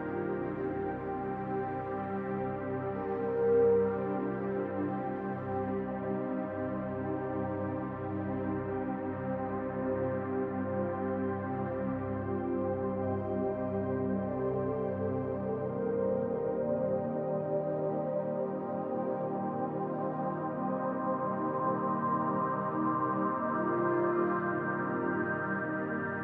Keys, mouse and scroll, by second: 0.3 scroll up 1, 1.8-3.1 middle drag, 3.1 click, 4.5 middle click, 4.5 click, 5.0-5.8 scroll up 1, 7.9-12.2 drag, 12.2 scroll up 2, 12.4-15.7 middle drag, 15.7-19.7 drag, 19.7 middle click, 20.2-21.9 drag, 21.9 middle click, 22.3 scroll up 2, 22.8-24.4 drag, 24.4 shift+middle click, 24.8 click, 25.7 middle click.